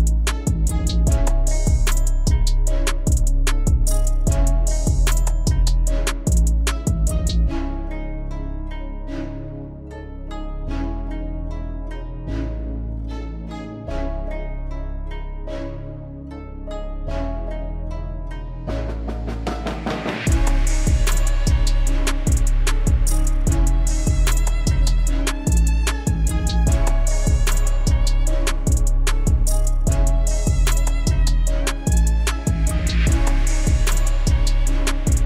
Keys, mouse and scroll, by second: 1.0 click, 2.0 right click, 2.6 click, 3.2 KP_1, 3.6 KP_3, 4.5-6.0 middle drag, 7.4 middle click, 8.4 Tab, 9.0 Delete, 9.2 click, 9.8 KP_7, 10.4 r, 12.6 s, 15.5 g, 18.1 shift+d, 19.5-20.2 middle drag, 20.2 scroll up 2, 20.5 click, 21.2 Delete, 21.5 click, 21.7-22.7 middle drag, 22.7 KP_3, 23.1 KP_1, 24.8 g, 26.2 click, 26.7 g, 27.8-28.6 middle drag, 28.6 KP_7, 29.3 click, 29.9 click, 30.3 click, 30.7 shift+z, 33.0 KP_3, 33.4 KP_1, 34.0 KP_3.